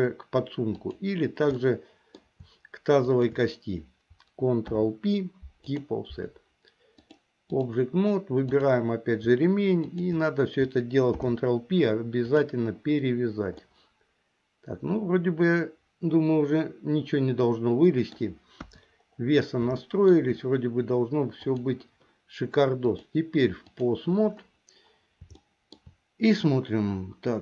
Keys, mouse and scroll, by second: 0.9 click, 1.8 middle click, 4.7 ctrl+p, 7.0 click, 8.7 click, 9.9 shift+click, 11.1 ctrl+p, 13.8-18.4 middle drag, 18.8 KP_1, 20.0 middle click, 21.5 click, 22.9-24.1 drag, 25.6 shift+middle click.